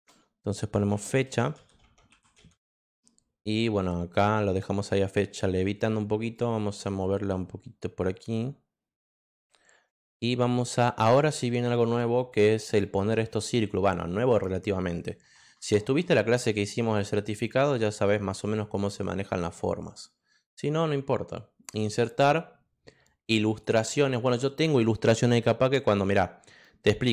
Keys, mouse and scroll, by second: 0.0-3.2 typing, 6.3-9.3 drag, 9.9 click, 21.6 click, 23.4 click, 27.0 click.